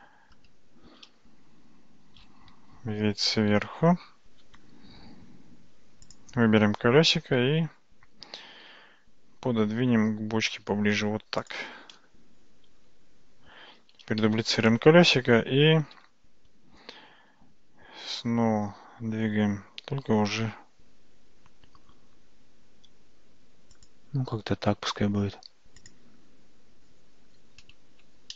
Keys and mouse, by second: 2.5 `, 7.4 g, 14.4 shift+d, 15.8 g, 25.9 click.